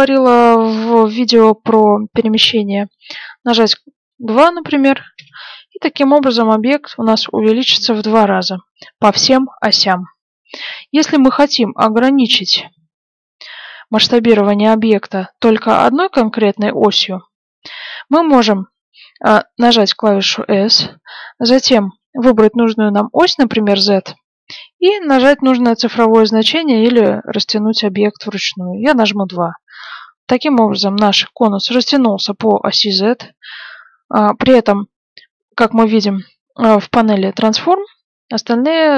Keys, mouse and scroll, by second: 12.9 ctrl+z, 20.5 s, 30.4 middle click, 31.6 middle click.